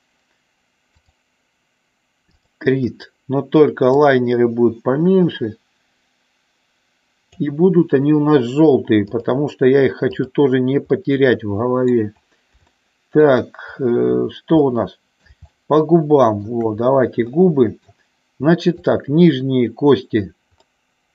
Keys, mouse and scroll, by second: 2.3 click, 3.9-7.3 drag, 9.2 click, 10.2 click, 11.1-12.2 middle drag, 12.8 shift+middle click, 14.7-16.6 middle drag, 17.3 middle click, 20.7-21.1 middle drag.